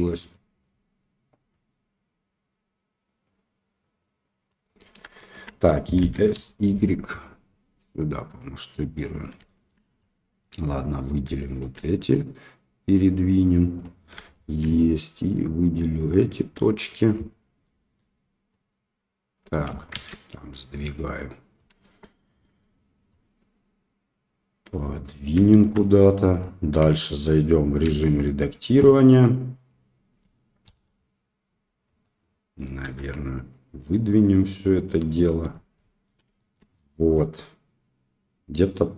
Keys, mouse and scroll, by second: 1.5-4.5 drag, 5.1 shift+middle click, 6.0 s, 9.4 shift+middle click, 10.2 click, 11.4 shift+middle click, 12.1-13.7 drag, 14.3 shift+middle click, 15.5 click, 16.5 middle click, 17.6 middle click, 18.5-19.7 drag, 19.9 ctrl+z, 20.5-21.5 drag, 21.8 Tab, 22.2 middle click, 23.1-24.7 drag, 25.4 shift+middle click, 25.7 middle click, 26.8 Tab, 27.8 a, 28.8-30.2 middle drag, 30.6 KP_7, 32.0 middle click, 32.8 e, 35.7 middle click, 36.3 shift+middle click, 37.1-38.9 middle drag.